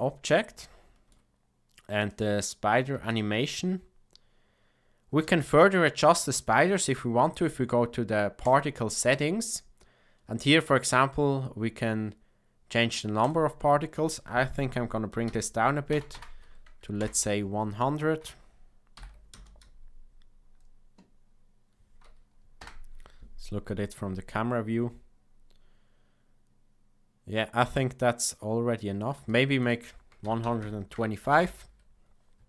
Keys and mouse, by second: 0.5-1.1 shift+middle drag, 2.9 space, 5.3 space, 13.3-17.4 drag, 16.1 KP_0, 18.9 shift+Left, 19.3 space, 22.6 KP_0, 29.0 space, 29.6-32.4 drag.